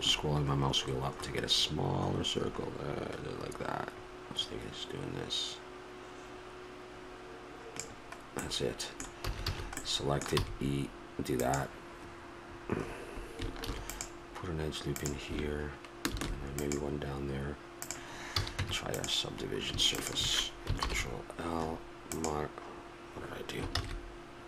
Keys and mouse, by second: 8.5 middle click, 9.3 a, 9.5 a, 9.9 middle click, 10.4 e, 13.6 ctrl+r, 18.3 ctrl+r, 18.3 a, 18.6 Tab, 19.9 click, 20.8 ctrl+l, 23.8 ctrl+z.